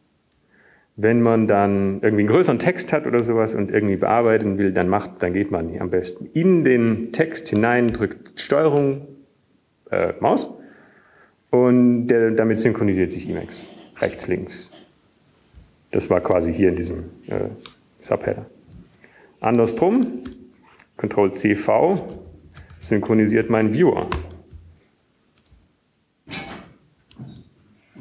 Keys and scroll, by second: 1.0 c, 21.8 Down, 23.9-25.5 typing, 26.6 ctrl+Up, 26.6 ctrl+Down, 26.6-27.5 typing.